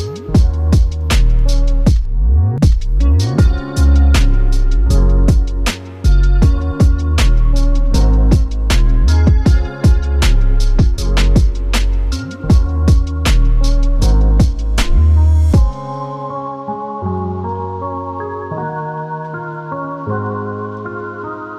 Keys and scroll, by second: 10.2 alt+super+b.